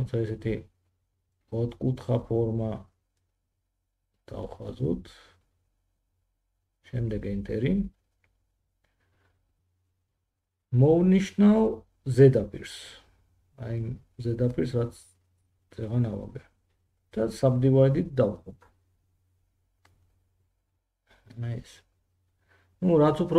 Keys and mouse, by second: 11.7 F3, 13.8 3, 16.8-23.3 drag.